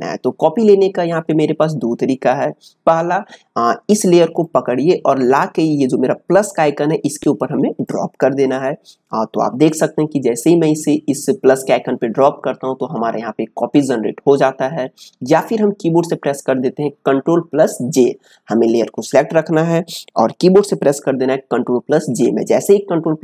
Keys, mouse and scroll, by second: 4.4 click, 15.0-18.5 drag, 18.7 click.